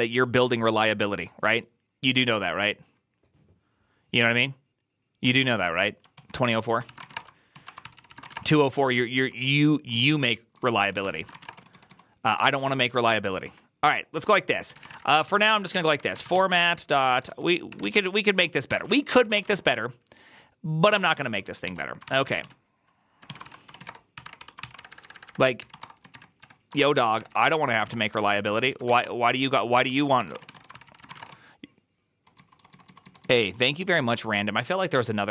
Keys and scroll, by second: 6.6-17.6 typing, 7.7 ctrl+c, 17.7 ctrl+y, 18.5 Tab, 18.7 ctrl+c, 18.8 ctrl+c, 19.1 ctrl+c, 19.2 shift+;, 20.5-33.3 typing, 23.3 ctrl+c, 27.4 ctrl+c, 29.8 ctrl+c, 33.8 alt++.